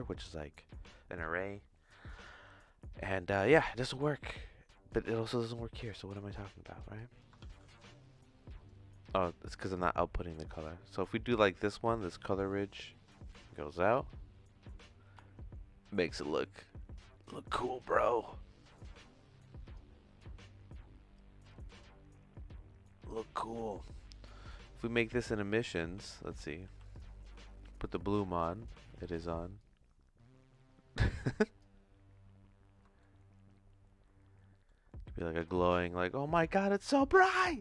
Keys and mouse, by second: 3.4 click, 3.7-5.0 drag, 5.2 click, 5.5 click, 6.3 middle click, 7.0 click, 7.4 shift+s, 8.5-9.8 drag, 10.6 middle click, 10.8 click, 11.5 click, 12.5-13.9 drag, 16.3 click, 17.2-19.7 drag, 21.5-23.1 drag, 23.4 middle click, 24.0 middle click, 25.2 click, 26.3 click, 27.8 click, 29.6-31.6 drag, 33.0-34.6 shift+middle drag, 35.4-37.6 drag.